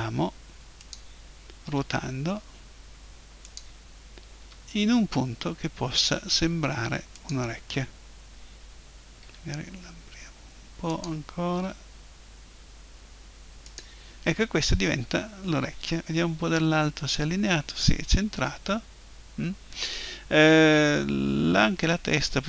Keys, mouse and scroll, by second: 0.9-2.9 drag, 1.7 r, 3.6-5.5 drag, 4.4 g, 7.3-9.1 drag, 9.2 s, 11.0-12.9 drag, 11.5 g, 13.7-15.6 drag, 16.4 KP_7.